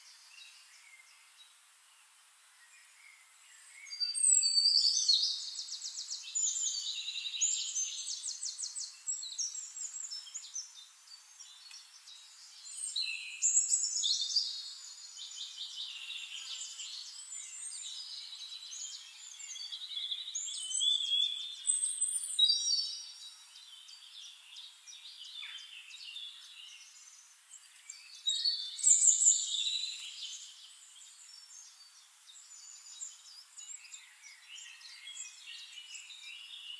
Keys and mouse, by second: 1.8-7.5 drag, 8.2-10.2 drag, 10.4-14.2 drag, 11.0 middle click, 12.0-14.2 shift+middle drag, 12.0-14.2 shift+right drag, 16.4-23.7 drag, 17.3 ctrl+d, 22.5 middle click, 22.7 middle click, 23.8 shift+click, 25.4-32.6 drag, 27.3-32.6 shift+right drag, 27.9-32.6 shift+middle drag, 32.9-36.7 drag, 33.7 middle click, 33.7 right click.